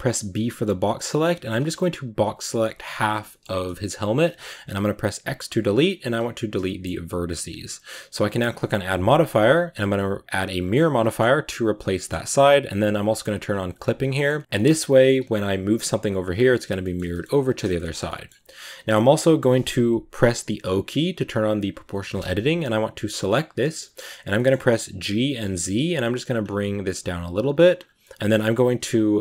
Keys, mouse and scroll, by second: 2.3 b, 3.1 shift+middle click, 3.2-6.1 scroll up 2, 6.1 x, 6.5 shift+middle click, 6.7-8.2 scroll up 2, 10.5 click, 10.9 shift+middle click, 11.7 scroll down 1, 11.8-13.6 shift+middle drag, 13.6 click, 14.0-15.2 shift+middle drag, 15.2 right click, 15.4 g, 16.5 scroll down 1, 16.7 shift+middle click, 17.1 scroll down 1, 17.3-20.4 middle drag, 20.4 o, 21.2 click, 21.5-23.1 drag, 23.1-23.4 right drag, 23.4 middle drag, 23.7 scroll down 1, 23.8-24.8 middle drag, 24.8 g, 27.9-29.2 middle drag.